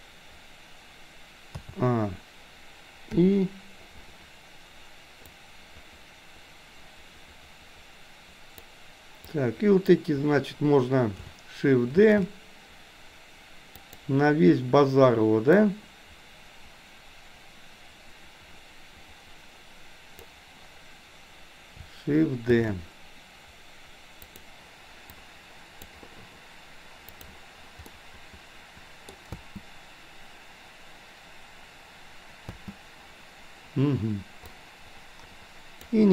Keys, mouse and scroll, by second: 1.7 a, 3.2 i, 5.4-8.7 drag, 9.3-9.9 drag, 12.1 shift+d, 15.7-20.3 drag, 22.6 shift+d, 25.2-25.9 drag, 27.8-29.1 middle drag, 29.3 space, 32.6 space, 34.6-35.9 drag.